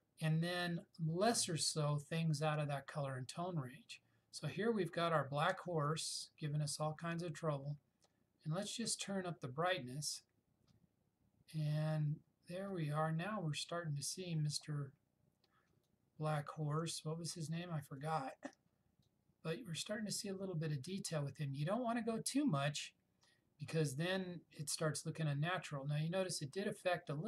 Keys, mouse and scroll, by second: 7.6-14.8 drag.